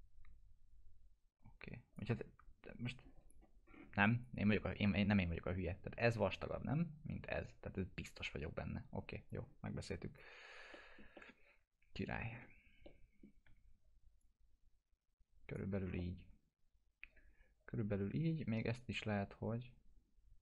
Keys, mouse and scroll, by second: 2.9-3.5 click, 3.7 scroll up 1, 4.0 click, 9.3-10.2 drag, 10.7 middle click, 11.2-12.4 alt+middle drag, 12.9-13.5 alt+middle drag, 14.2-15.8 drag, 15.7 scroll down 1, 16.0-20.4 alt+middle drag.